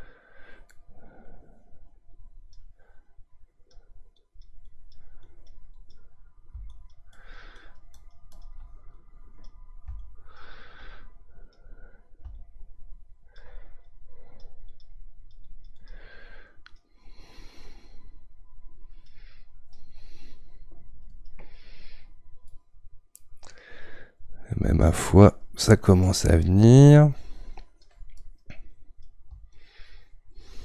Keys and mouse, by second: 0.7-2.1 middle drag, 2.1-22.5 drag, 22.5-24.9 middle drag, 24.9-30.6 drag.